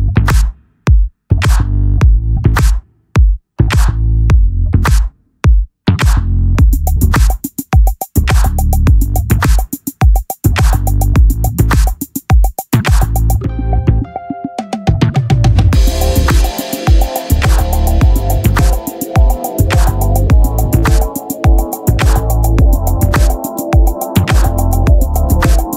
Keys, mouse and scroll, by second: 2.0 r, 3.4 c, 4.7-8.9 drag, 8.4 r, 9.5-10.7 drag, 13.2 Tab, 13.8 z, 17.1-19.6 drag, 20.1-22.8 right drag, 20.7 x, 23.3-24.9 drag, 24.9 t.